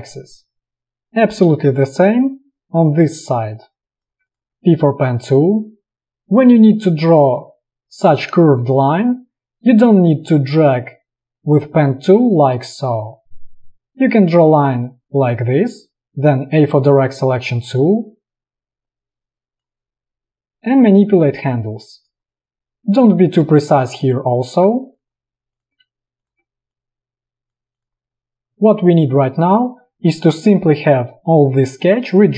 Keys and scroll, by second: 4.6 p, 6.1 space, 16.7 a, 23.6 space, 24.8 v, 28.5 space, 31.6 space.